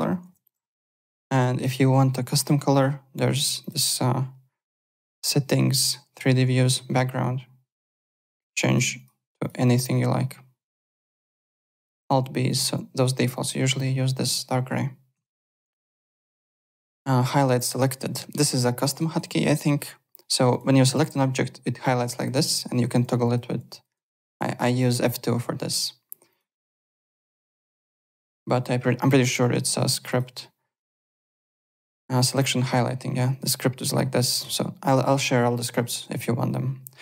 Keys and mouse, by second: 1.1 click, 3.6 click, 5.7 click, 7.2 click, 8.1 click, 10.9 click, 11.8 alt+b, 13.3 alt+click, 13.6 alt+middle click, 15.1 alt+Tab, 15.8 alt+click, 17.6 click, 18.4 click, 18.7 alt+middle click, 19.0 alt+right click, 20.5 click, 22.3 F2, 25.0 F2, 26.3 click, 28.3 Home, 29.5 click, 30.1 click, 32.1 click, 33.3 click, 36.3 click.